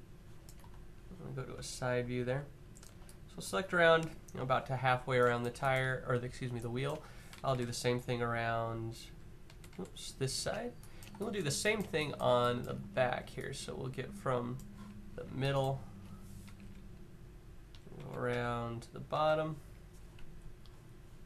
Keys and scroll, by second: 0.4 0, 7.3-8.2 Up, 8.3 Up, 8.4 Up, 8.6 Up, 8.8 Up, 9.2 Down, 9.4 Down, 16.4 Up, 17.0 Up, 17.8 Up, 18.9 Up.